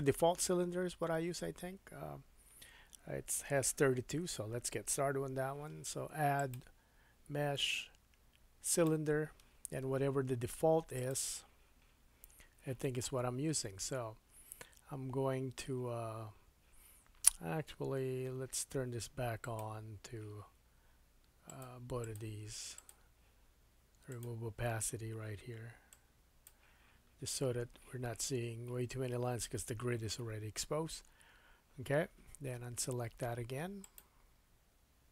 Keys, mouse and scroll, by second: 6.4 click, 10.9 click, 19.5 click, 19.6-21.5 middle drag, 21.5 click, 21.6 middle click, 22.0 click, 22.1 middle click, 22.7 click, 22.8-24.1 middle drag, 24.1 click, 24.2-25.9 middle drag, 25.9-33.9 drag, 33.9-35.1 middle drag.